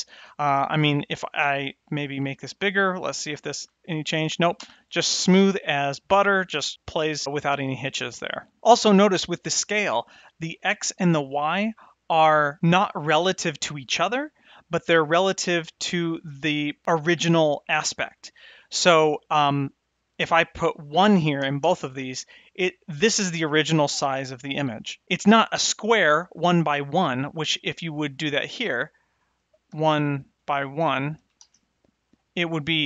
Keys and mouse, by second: 1.0-3.1 drag, 3.5 space, 19.8-23.4 drag, 28.3-31.9 drag.